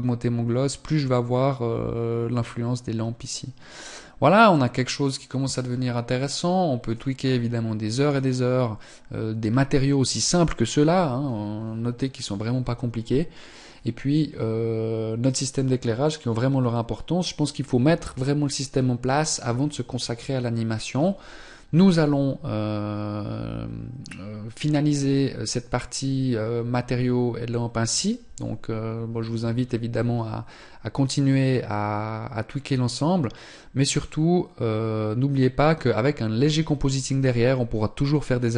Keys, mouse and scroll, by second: 6.7 click.